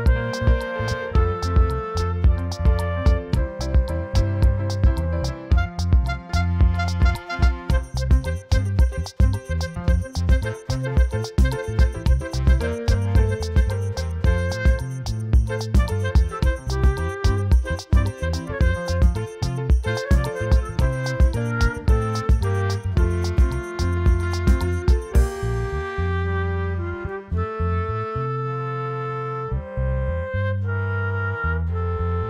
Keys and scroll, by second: 0.5 space, 1.6 space, 2.7 space, 3.7 space, 4.1 space, 5.0 v, 5.3 F9, 6.9 ], 7.4 [, 9.9-14.0 typing, 15.4 ], 18.7-21.7 typing, 22.8 [, 23.1 [, 28.6 ], 29.9 [.